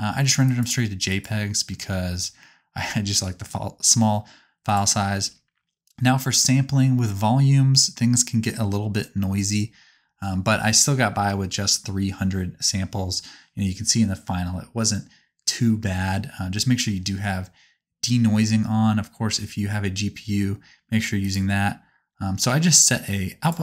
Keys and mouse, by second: 0.6 click, 1.2-4.7 middle drag, 4.7 click, 4.8-8.3 middle drag, 21.3 click.